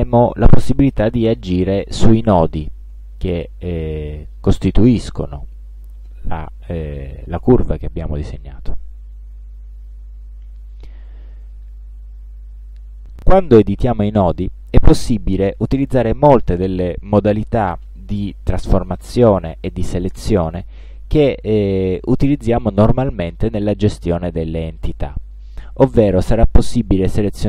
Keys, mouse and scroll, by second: 2.1 click, 4.1 click, 5.9 click, 7.7 click, 9.4 click, 11.4-12.1 drag, 27.2 click.